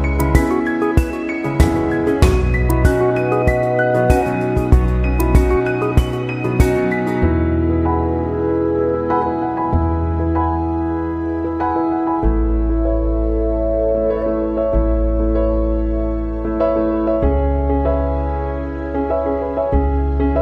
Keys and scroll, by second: 6.2 ctrl+0, 12.7 ctrl+=.